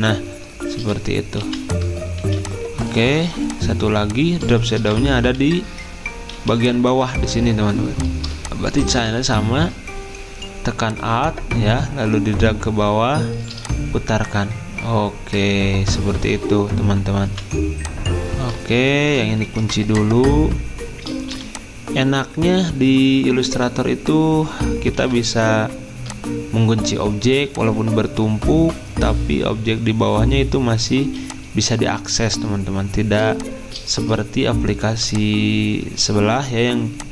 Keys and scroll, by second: 3.0-4.8 typing, 10.6-11.4 typing, 13.5 r, 18.6 ctrl+z, 19.4 ctrl+2, 21.3 r, 25.0 v.